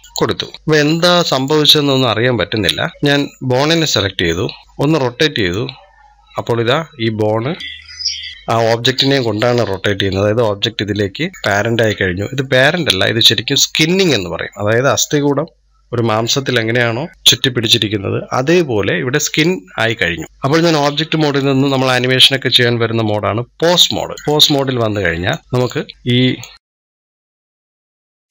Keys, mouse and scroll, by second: 1.1 click, 1.8-2.5 scroll down 1, 2.5-2.9 scroll down 2, 2.9-3.5 middle drag, 3.5 click, 4.6-6.8 drag, 12.1 ctrl+z, 20.5-25.2 drag, 25.4-26.4 drag, 27.2-27.5 drag, 27.9 click.